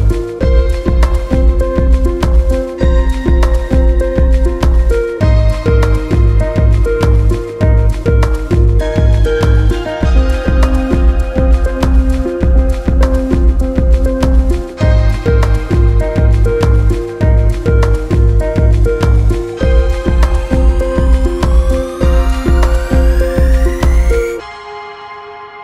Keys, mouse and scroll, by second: 0.9 KP_Add, 1.0 KP_Add, 1.1 middle click, 1.5 click, 2.5 shift+middle click, 2.7 click, 4.5 shift+middle click, 4.8 click, 6.6 click, 7.8 shift+middle click, 8.4-10.2 drag, 10.2 ctrl+z, 10.4 click, 11.2 middle click, 11.4-12.8 drag, 13.5 middle click, 13.8 click, 14.7-16.1 drag, 16.1 middle click, 16.7 click, 17.5 middle click, 17.7 click, 19.1-20.5 drag, 20.5 middle click, 21.0 click, 21.5 middle click, 21.6 click, 22.6 click, 23.3 middle click, 23.6 click, 24.9 click, 25.1 middle click.